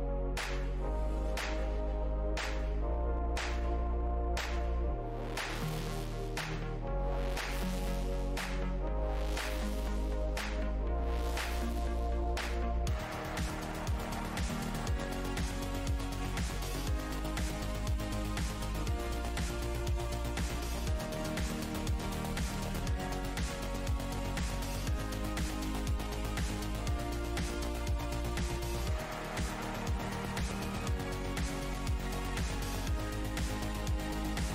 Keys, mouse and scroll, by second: 0.6 right click, 1.7 click, 7.2 alt+click, 7.8 click, 11.2 w, 11.5 shift+v, 14.2 w, 14.5 shift+v, 16.2-16.7 shift+scroll down 1, 16.2 v, 17.6 click, 18.8 right click, 19.7 click, 20.8 click, 22.3-23.4 alt+scroll down 3, 22.9 w, 24.4 alt+scroll down 1, 25.8-27.5 scroll down 1, 27.7 alt+click, 28.8 alt+click, 28.9 click, 28.9 w, 30.7 alt+click, 31.2-31.6 alt+scroll up 1, 32.1-32.9 alt+scroll, 33.0 alt+click.